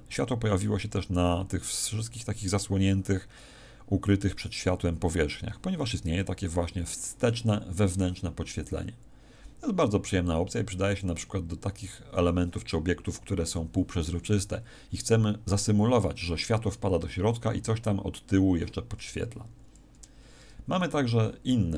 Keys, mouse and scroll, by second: 19.1 Escape, 19.5-20.6 scroll down 2, 19.9-20.6 scroll up 1, 21.0-21.5 scroll up 1.